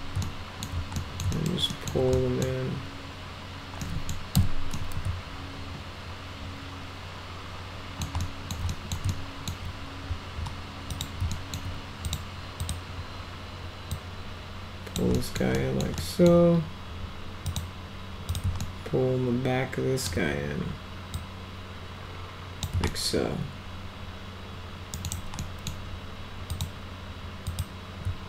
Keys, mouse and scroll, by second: 0.2 alt+middle click, 1.0 middle click, 1.4 alt+middle click, 1.7 alt+middle click, 2.2 middle click, 3.9 middle click, 4.4 F3, 4.8-8.0 alt+middle drag, 8.3 alt+middle drag, 8.7 middle drag, 9.1-9.5 alt+middle drag, 10.9 click, 11.3 alt+middle click, 12.1 click, 12.6 click, 13.9-15.0 drag, 15.2 middle drag, 15.6 middle click, 16.0 middle drag, 17.5 click, 18.3 click, 18.7-20.1 alt+middle drag, 21.2-22.6 drag, 22.9 alt+right click, 23.8-25.1 alt+middle drag, 25.0 alt+right click, 25.4 middle click, 26.5 click, 27.5 click.